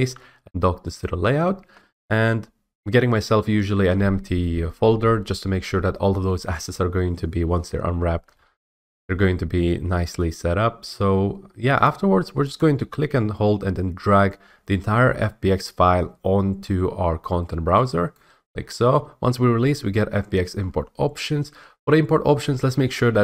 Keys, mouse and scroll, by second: 0.9 click, 11.8 click, 18.1 click.